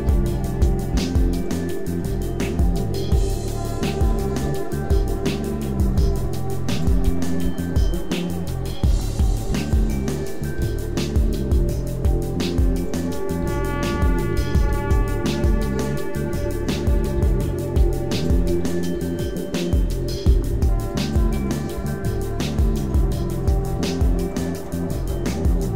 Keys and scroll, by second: 0.0 e, 0.6 x, 0.8 v, 2.0 e, 4.1 Tab, 4.4 a, 5.4 Tab, 6.2 x, 7.0 v, 7.4 e, 8.8 e, 9.4 e, 10.5 e, 13.2 Tab, 13.4 a, 13.8 Tab, 14.2 g, 14.6 r, 15.3 Tab, 15.6 a, 16.6 Tab, 17.1 x, 17.7 e, 18.5 Tab, 18.9 a, 19.1 Tab, 20.2 ., 20.4 s, 21.4 Tab, 21.6 a, 23.0 Tab, 23.7 x, 25.0 s.